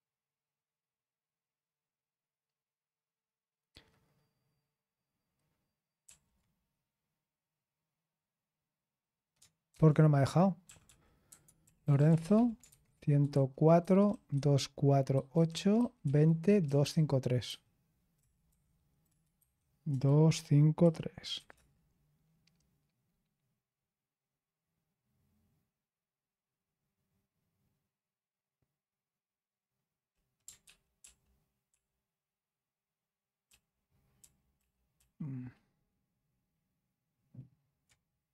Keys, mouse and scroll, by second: 6.0 ctrl+p, 9.7 ctrl+c, 10.6-21.3 typing, 21.5 Return, 30.6 ctrl+p, 31.0 ctrl+p, 31.6 ctrl+p, 33.4 ctrl+p, 34.1 ctrl+p, 34.9 ctrl+p.